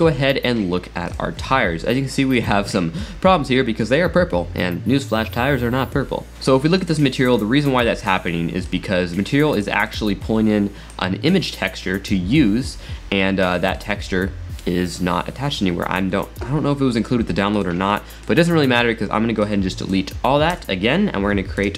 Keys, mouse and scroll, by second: 1.1 click, 2.2-3.1 middle drag, 3.1 middle click, 3.2 scroll up 3, 6.4-7.9 middle drag, 7.9-8.3 scroll down 3, 8.3-9.6 middle drag, 9.6 click, 10.9 click, 13.6-16.7 middle drag, 17.5 drag, 17.9 middle click, 18.5 scroll down 3, 19.5-19.9 drag, 20.6 x, 21.6 shift+a.